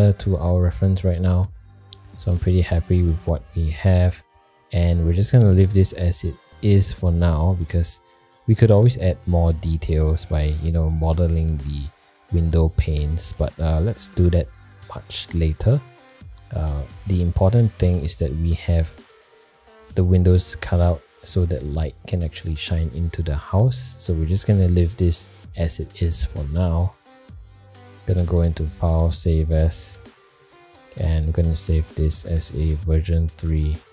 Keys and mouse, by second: 0.1-1.0 middle drag, 1.8 middle click, 2.5 shift+middle drag, 3.1 middle drag, 4.3 middle drag, 7.6 middle drag, 8.3 shift+middle click, 14.5 shift+middle drag, 16.0 middle drag, 17.2-17.5 middle drag, 17.9 shift+middle drag, 19.0 middle drag, 24.8-25.3 middle drag, 27.6-28.6 drag.